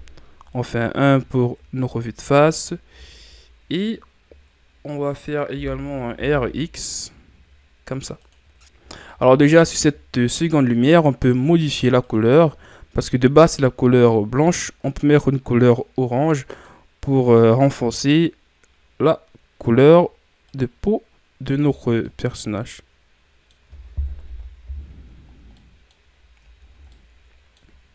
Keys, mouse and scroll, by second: 0.6-1.4 scroll up 4, 1.9 shift+scroll down 1, 2.5-3.0 scroll down 2, 3.0-5.5 shift+scroll up 2, 5.5 r, 9.0-15.7 middle drag, 15.7 click, 22.0-24.3 middle drag, 24.3 KP_1, 25.1-25.6 shift+scroll down 3, 25.6 middle click, 26.1-26.6 scroll up 4, 26.6 ctrl+scroll down 3, 26.9-27.9 middle drag.